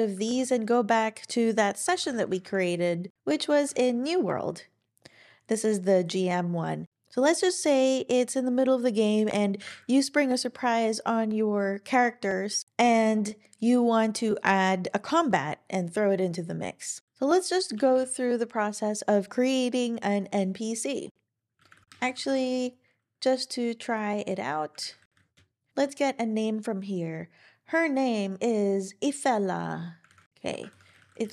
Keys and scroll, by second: 0.2 super+o, 1.6-3.1 typing, 9.6 ctrl+super+r, 21.6-22.6 typing, 24.8 super+a, 24.9-25.9 typing, 30.0 super+w, 30.4-31.3 typing.